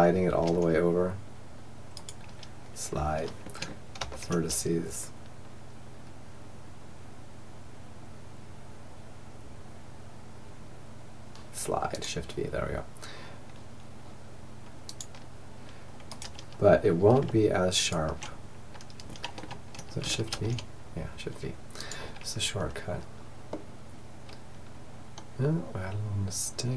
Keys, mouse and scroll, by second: 0.7-2.7 drag, 3.0 ctrl+v, 15.1-19.4 right drag, 19.4 shift+v, 21.5 middle click, 22.5-24.4 middle drag.